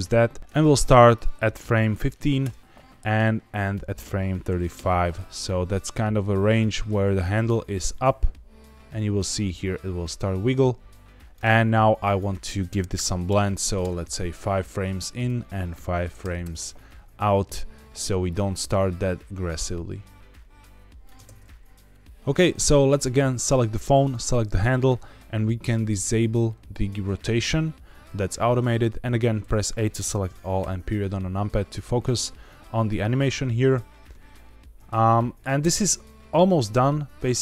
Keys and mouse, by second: 1.1-2.4 drag, 3.5-4.9 drag, 7.1-11.3 drag, 12.0-13.8 drag, 15.0-16.8 drag, 18.2-21.0 drag, 21.2 space, 22.9 click, 26.6 click, 29.3 a, 30.5 KP_Decimal, 35.5 space.